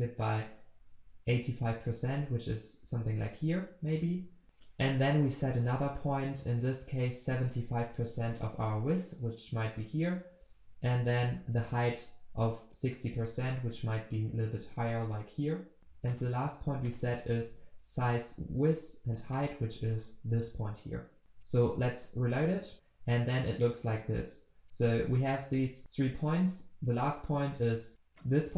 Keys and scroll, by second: 22.7 ctrl+s.